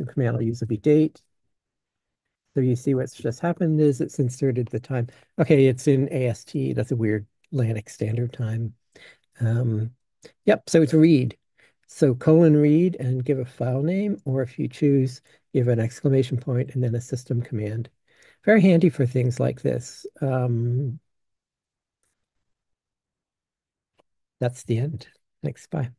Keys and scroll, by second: 0.1-4.0 typing.